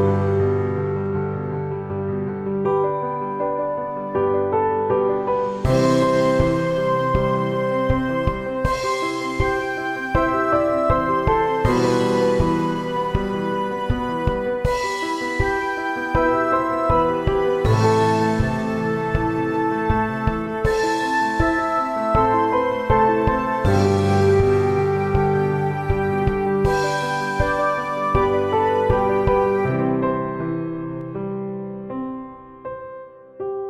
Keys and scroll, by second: 0.4 e, 1.1 e, 2.2 e, 3.3 shift+e, 3.8 shift+e, 5.2 shift+f, 5.3 a, 7.4 e, 8.4 e, 11.0-13.3 typing, 15.4 g, 17.4 shift+s, 18.4 a, 19.4 shift+s, 21.0 Tab, 24.5 shift+d, 25.1 d, 26.1 shift+f, 27.6 shift+f, 28.6 shift+a, 29.0 shift+f, 31.6 shift+f, 32.4 shift+f, 33.4 shift+f.